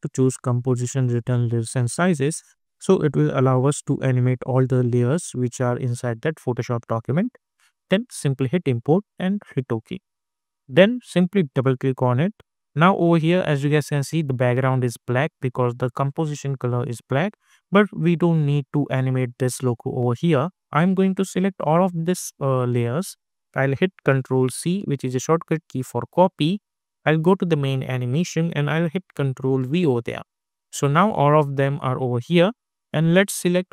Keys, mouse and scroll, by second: 8.2 click, 13.2-15.0 scroll up 1, 20.8-24.5 drag, 21.5 typing, 24.5 ctrl+c, 27.1 click, 27.1 typing, 29.4 ctrl+v.